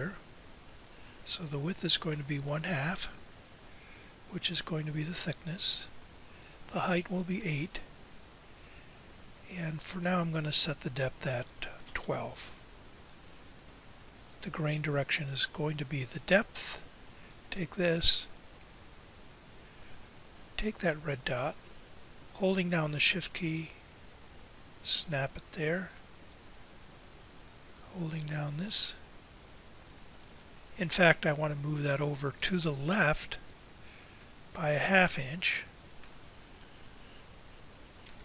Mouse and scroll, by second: 35.5-38.2 right drag.